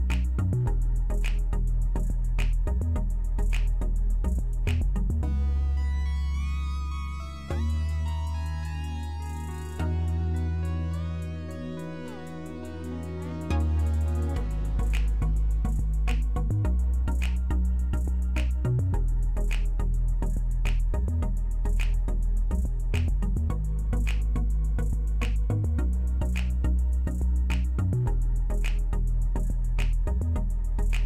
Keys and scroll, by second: 0.0-1.1 typing, 1.4 Return, 1.9 alt+w, 2.3 alt+w, 2.6 z, 4.0-4.9 typing, 6.3-7.0 typing.